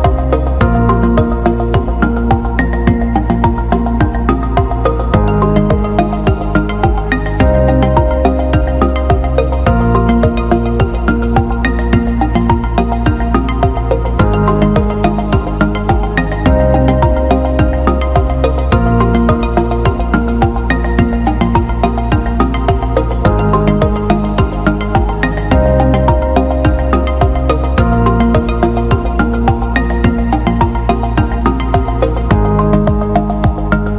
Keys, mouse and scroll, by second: 2.7 click, 3.9 shift+click, 4.2 alt+middle click, 5.3 shift+click, 5.8 alt+middle click, 6.9 shift+click, 7.2 alt+middle click, 7.8 alt+middle click, 10.9-14.9 drag, 15.3 alt+middle click, 16.0 alt+shift+middle click, 16.7 click, 17.1 alt+middle click, 17.4 alt+shift+middle click, 19.1 click, 19.7 shift+click, 19.9 shift+click, 20.9 alt+middle click, 22.2 click, 27.1 ctrl+b, 32.5 alt+shift+middle click.